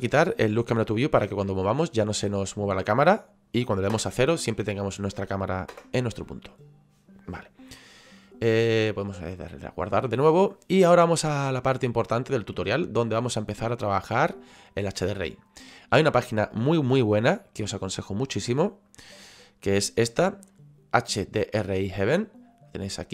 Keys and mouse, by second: 0.7 click, 3.9 KP_0, 5.0 middle click, 5.7 KP_0, 8.9 click, 18.9 click.